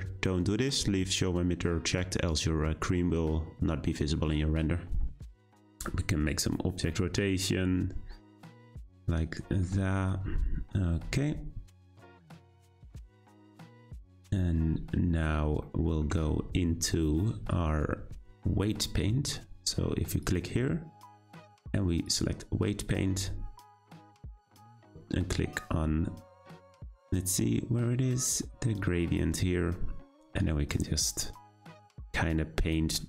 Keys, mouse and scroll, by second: 0.0 click, 5.3 scroll up 1, 6.3 click, 11.9-12.2 scroll down 4, 12.2-14.6 scroll up 3, 15.6-18.7 shift+middle drag, 20.2-23.2 drag, 29.0-30.5 drag.